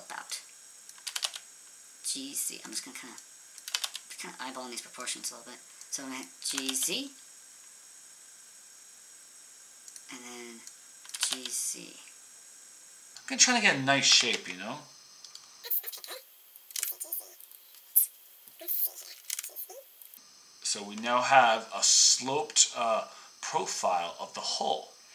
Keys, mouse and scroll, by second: 1.0 g, 2.7 click, 3.6 g, 5.8 click, 6.4 g, 11.1 g, 13.1-15.8 drag, 13.1 g, 14.0 g, 16.7 g, 19.2 g, 20.0 click, 20.1-24.2 drag.